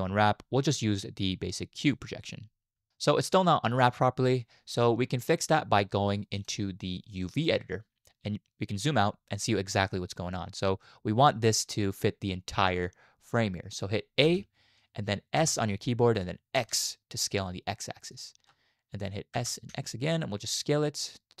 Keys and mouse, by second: 6.3-7.7 drag, 14.2 a, 15.3 s, 19.3 s.